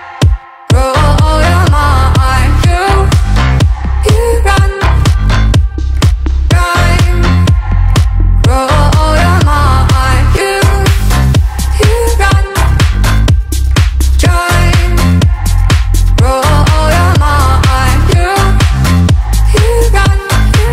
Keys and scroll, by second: 20.6 ctrl+-.